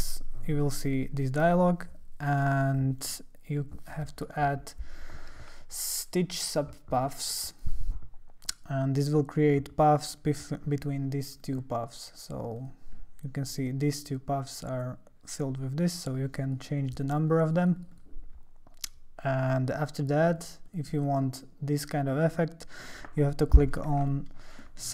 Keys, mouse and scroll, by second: 3.0 click, 7.2 click, 11.4 click, 12.6 click, 16.1 click, 16.5 click, 16.6 click, 16.8 click, 17.1 click, 17.3 click, 17.5 click, 17.6 click, 17.8 click, 17.9 click, 19.4 click, 20.3-22.7 drag, 24.1-24.9 alt+middle drag.